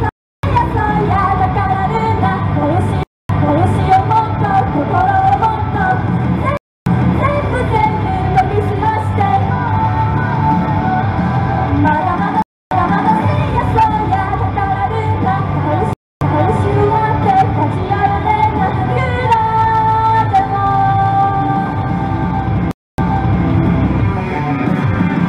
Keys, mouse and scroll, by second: 0.1 right click, 0.3 Return, 0.5 space, 3.0 right click, 3.2 Return, 3.3 space, 6.7 Return, 6.9 space, 12.4 right click, 12.6 Return, 12.8 space, 15.9 right click, 16.1 Return, 16.2 space, 22.7 right click, 22.8 Return, 23.0 space.